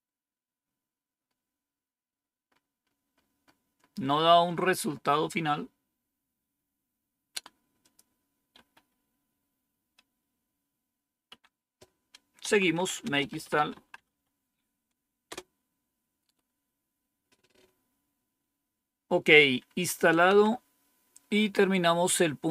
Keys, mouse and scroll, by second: 1.1-2.0 scroll up 1, 2.0-2.3 scroll up 1, 2.3-2.8 scroll down 2, 3.6-5.7 scroll down 4, 5.7 scroll down 1, 7.7 click, 12.1-14.5 typing, 15.1 Return, 19.5 Up, 20.1 Down, 21.7-22.5 scroll down 1.